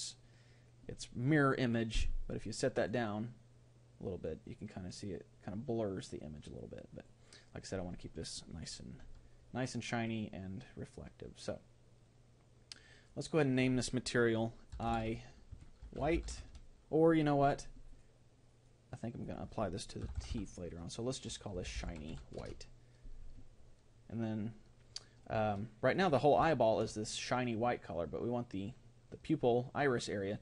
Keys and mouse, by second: 25.4-30.4 middle drag.